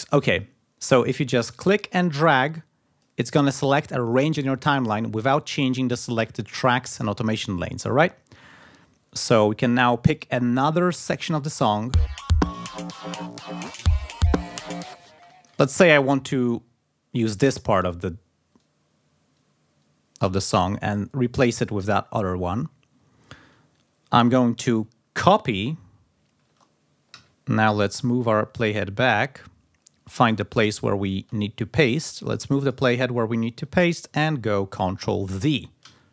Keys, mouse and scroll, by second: 1.9-2.9 drag, 9.4 ctrl+scroll up 2, 11.1 click, 11.7 space, 14.4 ctrl+scroll down 2, 14.8 ctrl+space, 15.5 ctrl+scroll up 2, 16.5 ctrl+scroll down 2, 18.3-20.8 drag, 23.1-23.4 ctrl+scroll down 2, 26.8 ctrl+c, 27.8-28.8 drag, 28.8-29.1 scroll up 1, 30.2-30.6 ctrl+scroll up 2, 32.8 ctrl+scroll down 2, 34.7 ctrl+scroll down 2, 35.6 ctrl+v.